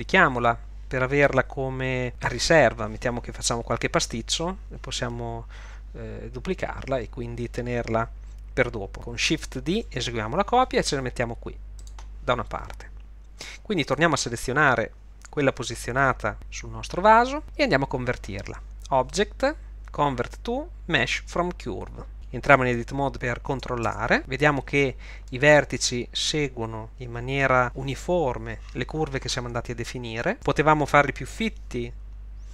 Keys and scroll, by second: 9.7 shift+d, 23.9 Tab.